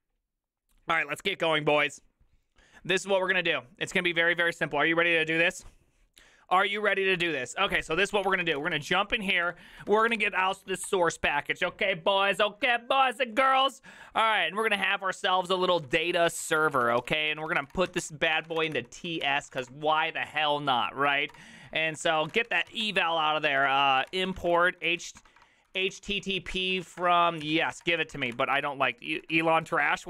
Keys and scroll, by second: 8.0 alt+{, 8.0 ctrl+c, 8.2 ctrl+:, 8.2-11.4 typing, 8.3 Return, 14.4 ctrl+c, 14.4-28.6 typing, 29.0 ctrl+w, 29.2 ctrl+w.